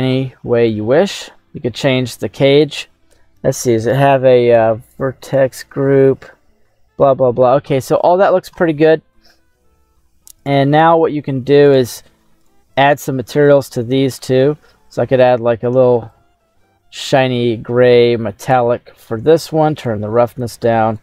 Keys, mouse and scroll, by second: 0.6-2.6 drag, 4.7 click, 5.2 click, 8.6-10.0 middle drag, 10.4 right click, 11.7 right click, 12.4 right click, 13.4 click, 14.1 click, 15.1 click, 18.4 click, 19.8 click, 20.9 right click.